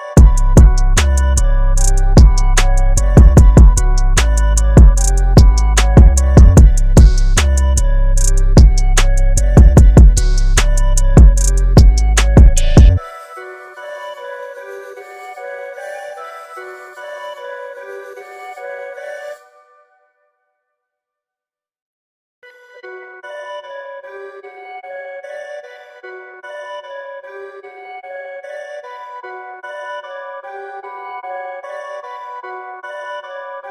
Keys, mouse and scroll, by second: 4.8-6.0 scroll up 1, 9.3-11.0 scroll down 1, 11.0-11.3 scroll up 1, 12.8-14.2 scroll down 1, 14.6-15.8 scroll down 1, 15.8-16.6 scroll up 1, 18.5 click, 19.5 KP_1, 19.7 KP_8, 20.8 click, 22.6 KP_9, 23.6 click, 26.4 click, 27.4 KP_2, 28.4 click, 31.0 KP_2, 32.2 click.